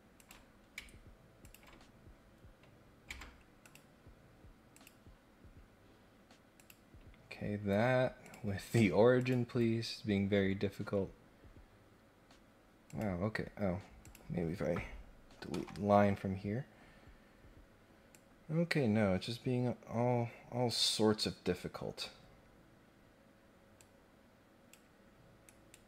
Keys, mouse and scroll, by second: 0.1 click, 1.4 ctrl+click, 3.6 click, 4.7 click, 6.6 click, 8.2 click, 9.1 ctrl+click, 12.8 click, 14.0 click, 15.5 Delete, 18.1-20.7 drag, 23.8 click, 25.4 right click.